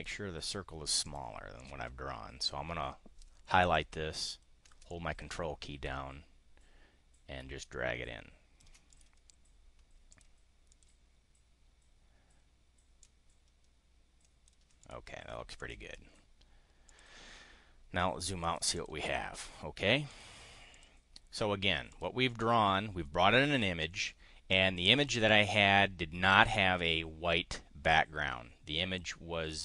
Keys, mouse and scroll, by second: 1.0 click, 1.5 click, 4.9-8.7 ctrl+drag, 8.9 click, 10.0 click, 10.6 click, 12.9 ctrl+click, 14.8 click, 15.6 click, 16.9 click, 18.4 click, 20.0 click, 20.7 click, 21.9 click, 22.1 click.